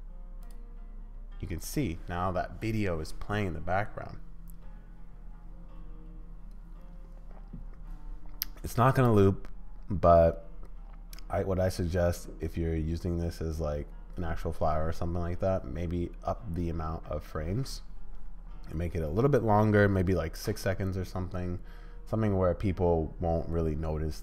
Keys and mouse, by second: 0.4 click.